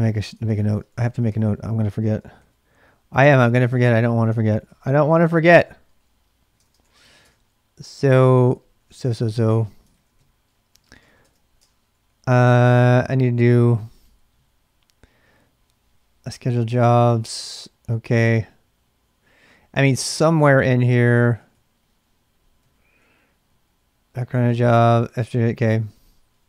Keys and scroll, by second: 1.0 ctrl+a, 2.0 ctrl+a, 2.4 2, 3.6 ctrl+a, 3.7 ctrl+a, 4.5 ctrl+a, 4.7 ctrl+a, 5.0-8.8 typing, 9.9-14.8 typing, 11.6 Return, 17.0-26.4 typing.